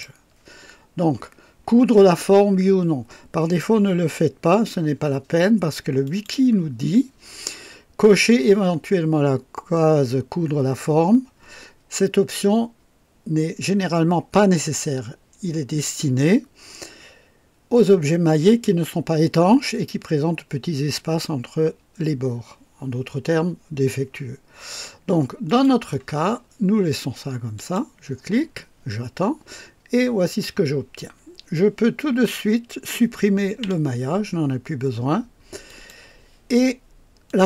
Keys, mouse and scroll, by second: 0.0 click, 6.0 click, 25.5 click, 27.5 click, 33.6 Delete, 35.7 click, 37.3-37.4 drag.